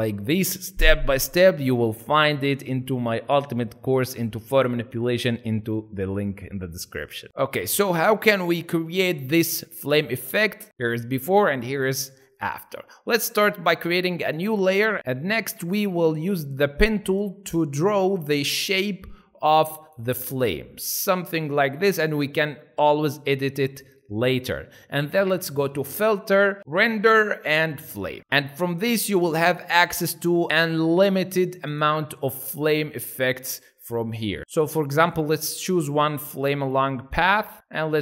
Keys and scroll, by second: 15.2 p.